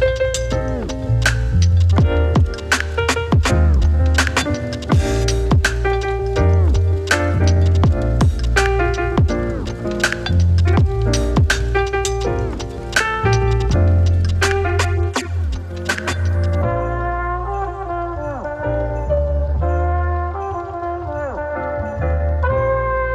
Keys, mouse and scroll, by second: 4.8 space, 6.8 click, 10.7-14.7 drag, 19.2 click, 21.6 space.